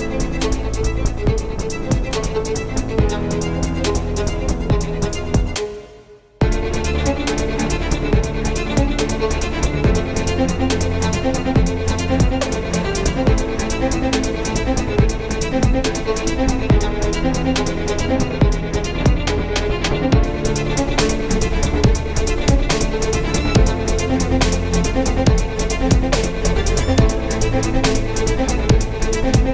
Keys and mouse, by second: 1.1 z, 2.2 x, 6.2 KP_1, 9.2 shift+a, 12.7 s, 12.9 drag, 13.5 s, 14.1 KP_3, 15.5 r, 16.6 KP_1, 17.3 z, 17.8 s, 20.7 s, 23.1 s, 25.5 s, 27.7-28.6 middle drag, 29.0 z.